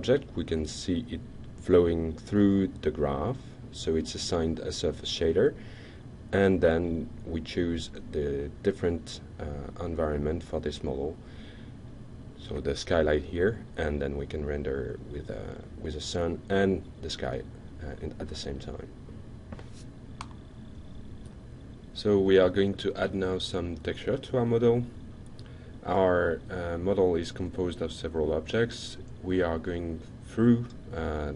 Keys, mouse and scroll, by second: 2.9 drag, 6.5 click, 8.6 click, 9.6 click, 10.9-11.6 shift+middle drag, 14.8-15.4 alt+drag, 16.0-16.8 shift+middle drag, 19.3 click, 27.2 ctrl+click, 28.6 ctrl+click.